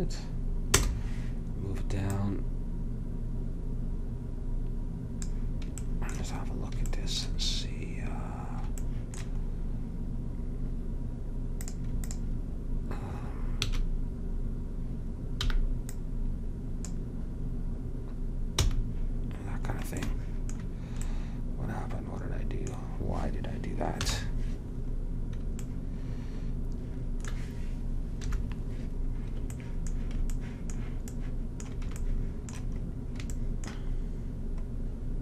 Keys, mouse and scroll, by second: 2.2-5.3 drag, 5.9-9.7 middle drag, 11.7-13.7 drag, 13.7 a, 15.6 b, 18.7 f, 20.2 middle click, 24.2 KP_1, 28.4 KP_7, 32.4 middle click, 33.5 middle click.